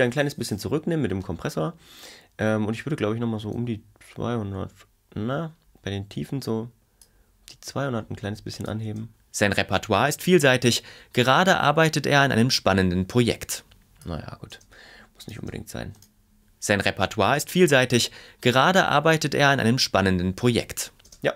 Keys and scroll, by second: 8.8 space, 14.5 space, 21.1 space.